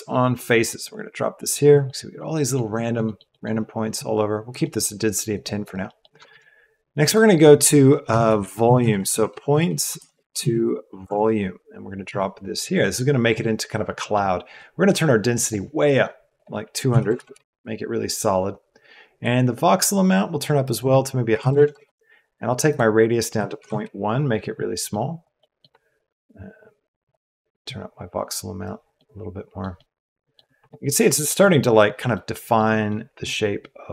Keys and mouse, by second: 1.8 middle click, 2.9 middle click, 3.3 middle click, 4.6 middle click, 5.3 click, 6.2 shift+a, 13.9 click, 14.5 click, 16.3-17.3 drag, 17.2 KP_0, 19.1-21.7 drag, 21.6 KP_0, 22.6-23.7 drag, 24.8 click, 25.3 middle click, 27.1-28.4 middle drag, 28.4 click, 28.6-29.6 middle drag, 28.9-29.5 drag, 28.9-29.5 right drag, 29.7-30.3 middle drag, 31.4 middle click, 32.1 middle click, 32.8-33.9 middle drag.